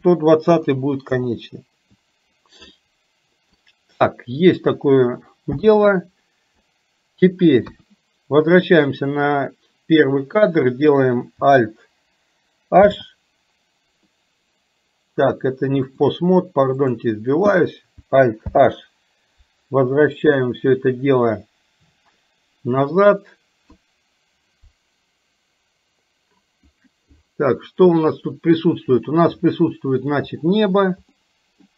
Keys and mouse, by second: 2.8 middle click, 7.7 KP_1, 9.3 click, 12.8 alt+h, 16.0-17.3 drag, 20.2 alt+h, 29.5 middle click, 31.3 middle click.